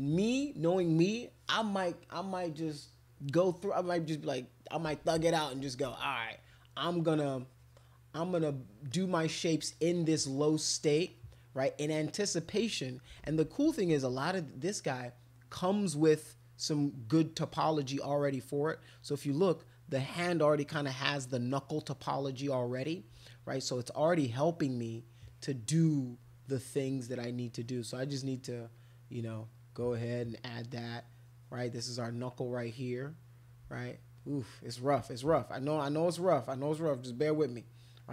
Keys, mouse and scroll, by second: 5.9 click, 7.0 click, 8.2 click, 8.9 click, 9.7 click, 11.1 click, 12.1 click, 12.5 click, 13.2 ctrl+z, 18.9 click, 23.7 click, 24.1 click, 24.3 click, 25.2 click, 27.5 click, 27.9 click, 28.6 click, 29.4 click, 29.7 click, 29.9 click, 30.8-32.4 drag, 32.7 click, 33.9 shift+click, 34.2 shift+click, 34.6 shift+click, 34.8 shift+click, 35.2 click, 35.7 click, 35.9 click, 36.8 click, 37.7 click.